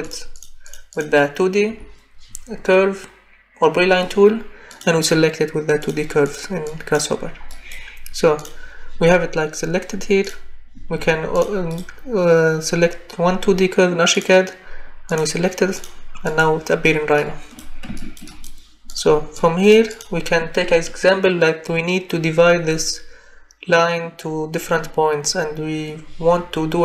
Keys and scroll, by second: 0.0 Escape, 1.7 Escape, 10.7 Escape.